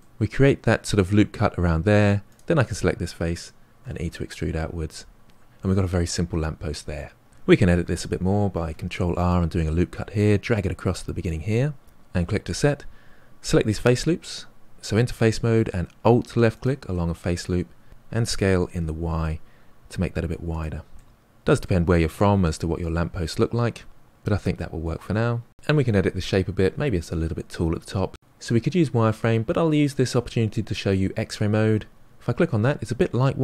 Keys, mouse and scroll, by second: 2.2 click, 3.7 e, 5.2 scroll down 3, 5.3-6.3 middle drag, 7.3-8.5 shift+middle drag, 8.5 ctrl+r, 14.8-16.6 drag, 17.9 s, 20.1-21.7 middle drag, 21.7-22.1 scroll down 2, 22.1-24.2 middle drag, 24.6 middle click, 31.9-33.4 drag.